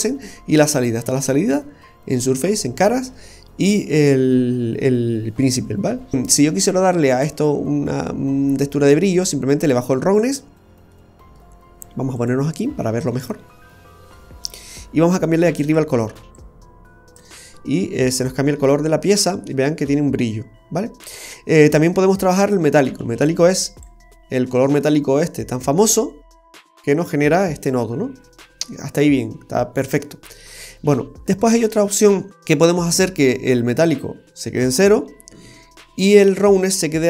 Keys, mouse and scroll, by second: 3.3 scroll up 1, 9.6 click, 10.6-11.3 scroll down 2, 12.2 click, 12.8-13.4 scroll up 2, 13.1 middle click, 15.5 click, 18.3-18.8 scroll up 2, 18.6 middle click, 20.2 middle click, 23.2 click, 24.5-24.8 scroll down 1, 24.8 middle click, 28.1-28.7 scroll down 3, 28.6 middle click, 30.8 scroll up 1, 31.3-32.0 scroll up 3, 34.0 click, 36.5 click.